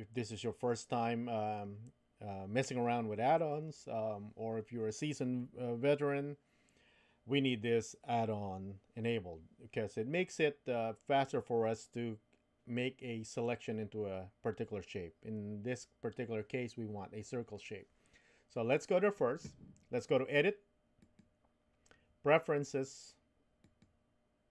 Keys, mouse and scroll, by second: 21.0-24.1 drag.